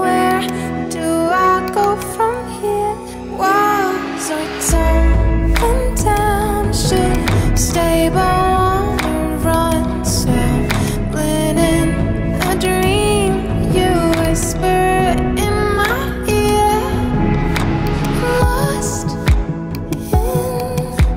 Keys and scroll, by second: 2.9 Right, 3.4-4.8 typing.